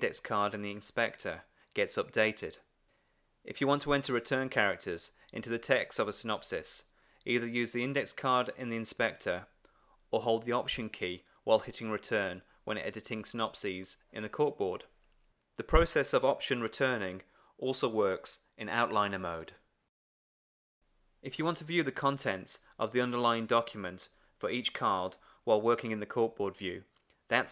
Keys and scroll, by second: 0.7 Return, 4.9 Return, 7.0 super+v, 14.8 alt+Return, 17.7 super+v, 21.1 Return.